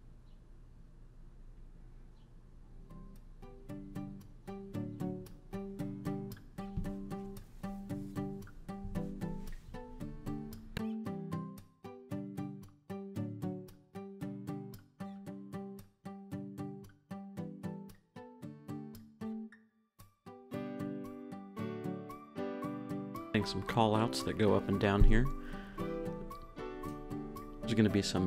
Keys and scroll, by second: 0.2 Down, 1.6 Up, 2.9 Up, 5.8 l, 15.1-16.2 typing, 18.2-21.2 typing, 23.9 Down, 25.3 Down, 25.9 Up.